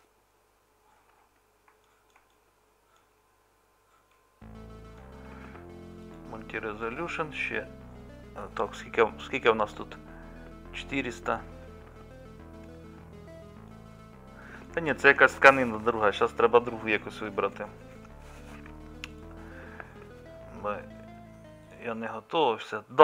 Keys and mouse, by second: 1.4 middle click, 2.1-9.1 middle drag, 11.5-14.7 middle drag, 15.1-23.0 middle drag.